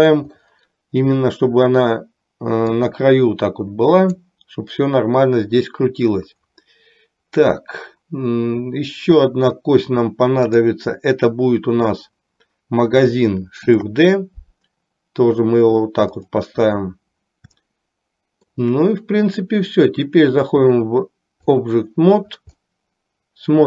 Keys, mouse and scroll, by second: 3.0-4.3 drag, 10.6 click, 13.8 shift+d, 17.7 shift+middle click, 20.8-22.0 drag, 22.7-23.6 middle drag.